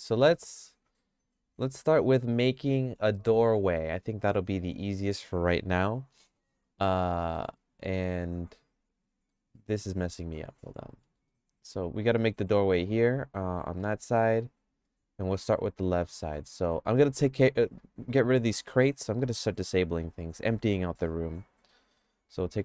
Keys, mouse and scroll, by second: 6.8 click, 7.3 middle click, 7.7-9.3 shift+middle drag, 9.5 middle click, 10.4 click, 11.0 middle click, 11.4-13.9 shift+middle drag, 14.8-15.8 middle drag, 19.5 click, 21.1 click, 22.2 click.